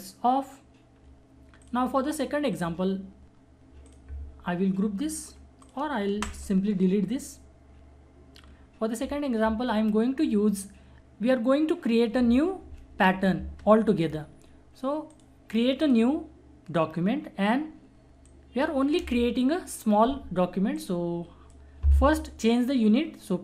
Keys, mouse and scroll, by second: 1.6 alt+click, 6.1 alt+Delete, 15.1 alt+click, 18.3-23.4 alt+drag.